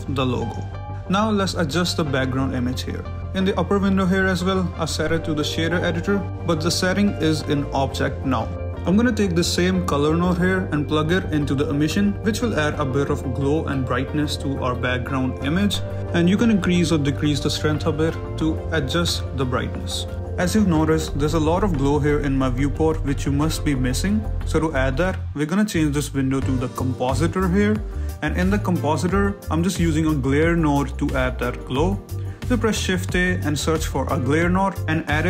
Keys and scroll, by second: 1.2 shift+z, 3.7 a, 4.5 g, 7.6 Escape, 9.5 a, 18.4 r, 19.7 Escape, 20.5 a, 26.6 a, 27.7 shift+a, 28.4 Escape, 28.8 shift+a, 30.5 Escape, 34.5 g.